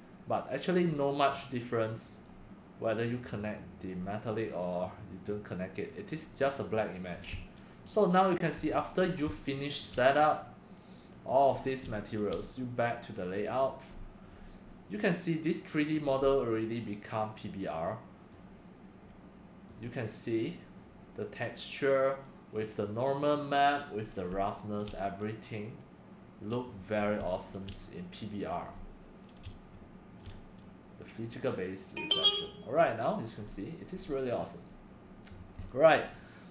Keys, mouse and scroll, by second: 1.5 click, 2.7-7.1 drag, 7.2-10.0 drag, 11.5 scroll up 3, 12.0 shift+drag, 13.3 click, 13.4 shift+middle click, 13.9-14.3 scroll up 4, 14.3 scroll down 2, 14.9-15.3 middle drag, 15.5-22.8 middle drag, 21.9 click, 23.9-24.4 middle drag, 24.8-28.4 shift+middle drag, 28.5 middle drag, 29.3-29.8 middle drag, 29.8-30.2 scroll up 4, 30.0 middle drag, 30.2-32.7 shift+middle drag, 33.3 middle click, 33.4 middle click, 34.0-34.4 right drag, 34.4 middle click, 36.1 click.